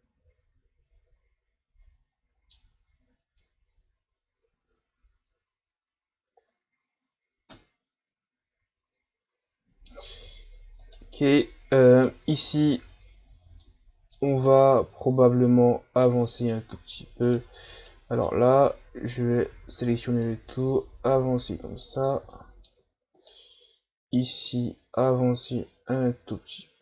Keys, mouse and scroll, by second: 10.1 Tab, 10.8 right click, 11.9 right click, 12.6 l, 13.3-13.6 scroll down 1, 13.6-16.8 middle drag, 16.8 Tab, 17.2 right click, 17.9 middle click, 18.5 Tab, 19.3 a, 19.5 a, 20.2-22.3 drag, 22.3 middle click, 22.8 Tab, 23.2 right click, 23.5 Tab, 24.1 a, 24.4 a, 25.0-26.8 drag.